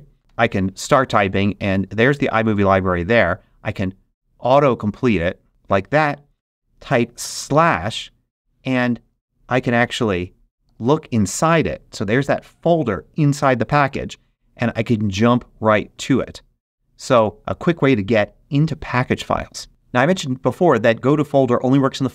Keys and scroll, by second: 0.2 i, 1.2 o, 3.3 Tab, 7.2 /, 9.9 shift+e, 10.6 shift+x, 13.8 Return.